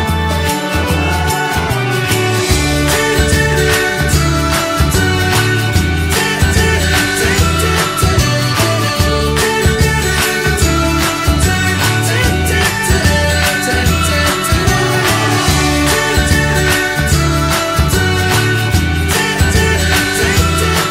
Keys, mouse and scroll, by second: 5.6 click, 5.8 scroll up 1, 6.0-7.5 shift+middle drag, 7.5-9.7 drag, 10.5-11.6 middle drag, 11.6 alt+z, 11.9 middle click, 12.5 alt+z, 12.8 middle click, 13.5 click, 14.2 alt+middle click, 15.2 click, 16.7 ctrl+a, 19.0 middle click, 19.5 click, 20.1-20.9 alt+middle drag.